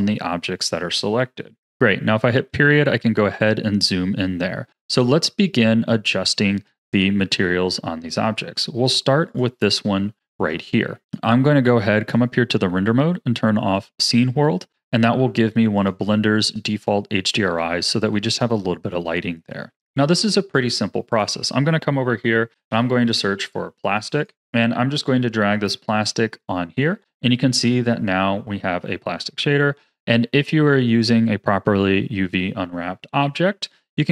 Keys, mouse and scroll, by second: 2.3 KP_Decimal, 3.4-8.2 middle drag, 9.2 click, 10.1 ctrl+s, 11.0 click, 11.9-17.8 drag, 17.8-21.0 shift+middle drag, 21.0-24.0 drag, 25.0-26.0 drag, 27.4-28.3 middle drag, 28.3-28.8 scroll up 2, 28.8-29.4 shift+middle drag, 29.4-30.0 scroll up 1, 30.0 scroll up 1, 30.2-33.2 middle drag, 33.8-34.1 scroll up 5.